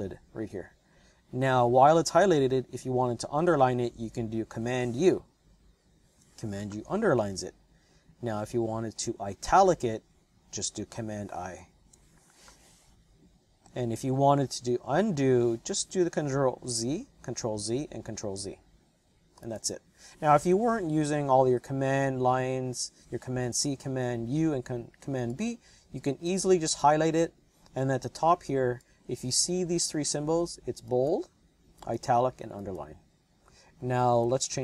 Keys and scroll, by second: 5.5 super+u, 11.6 super+i, 16.2 super+z, 17.3 super+z, 17.9 super+z.